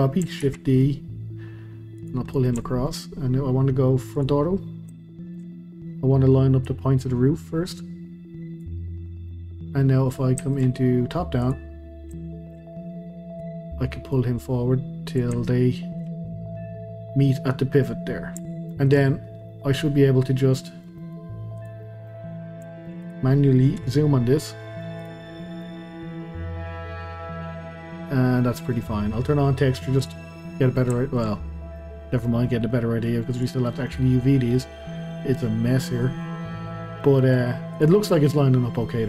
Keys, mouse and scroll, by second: 0.4 shift+d, 2.3-4.1 middle drag, 4.1 click, 4.6-5.0 scroll up 1, 5.0-5.6 shift+middle drag, 5.6-6.1 scroll up 1, 6.6 click, 9.0 scroll down 1, 9.3-11.4 middle drag, 11.4 click, 11.9-12.2 scroll up 2, 12.2-13.4 shift+middle drag, 13.4 click, 15.4-16.3 shift+middle drag, 16.3-17.6 scroll up 2, 17.6-17.9 scroll up 1, 17.9 scroll down 2, 18.4-19.1 shift+middle drag, 19.1-19.5 scroll down 1, 19.5-21.6 middle drag, 21.6 click, 21.8-22.3 middle drag, 22.3-22.7 scroll up 1, 22.7-23.0 shift+middle drag, 23.0 click, 23.8 KP_Decimal, 24.4 scroll down 2, 24.6-25.0 middle drag, 25.0 click, 25.3-25.6 scroll up 2, 25.6-28.6 middle drag, 30.1 click, 30.4-31.3 middle drag, 31.3-31.8 scroll up 2, 31.8-32.5 middle drag, 32.5 scroll down 2, 32.7-33.3 middle drag, 33.3 click, 33.7 scroll down 2, 33.9-36.1 middle drag, 36.1 scroll down 2, 36.2-37.7 middle drag, 37.7 click, 38.6 scroll down 2, 38.8-39.0 middle drag.